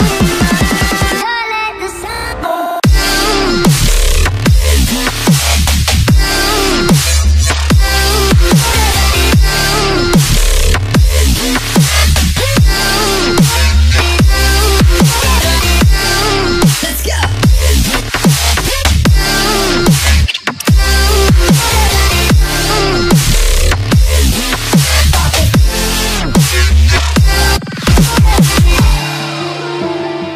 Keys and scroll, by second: 17.7 Left, 22.9 Right, 24.2 Right, 27.3 Left.